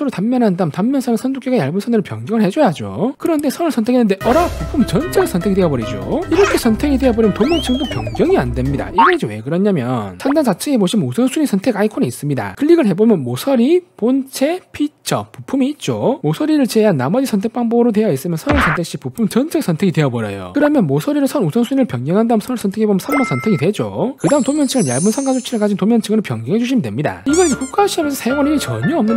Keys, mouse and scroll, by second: 2.3 click, 5.2 click, 9.4 click, 12.7 click, 17.4 click, 18.1 click, 19.1 click, 19.5 click, 20.4 click, 20.7 click, 21.6 click, 22.7 click, 24.3 click, 26.0 click, 26.7 click.